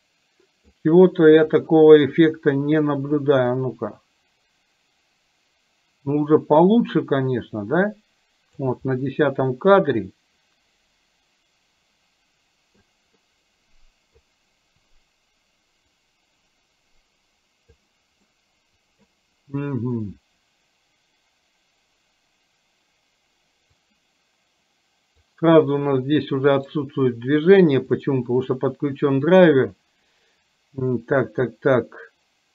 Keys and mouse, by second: 3.7-8.8 drag, 9.2-12.9 middle drag, 13.3-14.3 middle drag, 15.9-17.9 drag, 18.3-19.2 middle drag, 24.0-25.3 drag, 26.7-32.5 right drag.